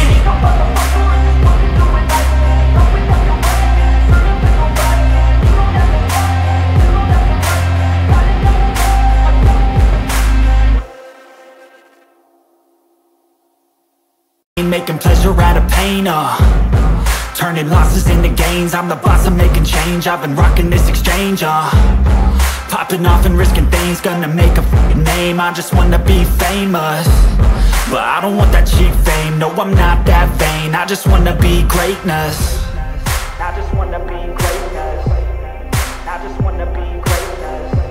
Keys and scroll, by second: 12.1 ], 31.9 ctrl+t.